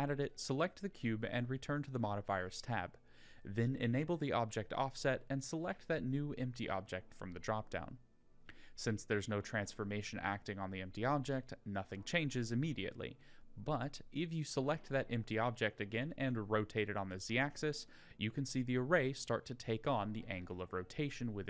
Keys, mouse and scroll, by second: 0.7 click, 1.6 click, 2.7-4.5 drag, 13.4 click, 14.6-15.0 middle drag, 15.6 click, 16.3 r, 21.3 click.